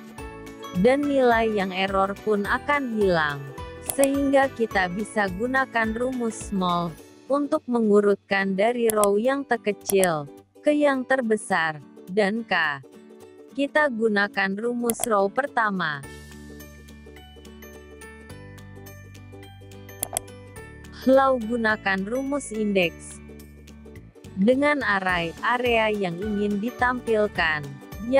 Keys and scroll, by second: 0.6 F9.